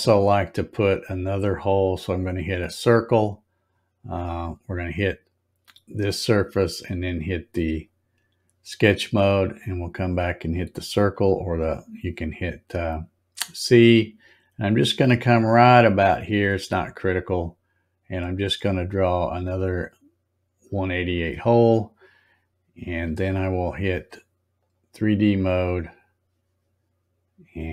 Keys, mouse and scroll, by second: 5.2 click, 7.7 click, 10.9 click, 17.2-21.0 drag, 24.5 click.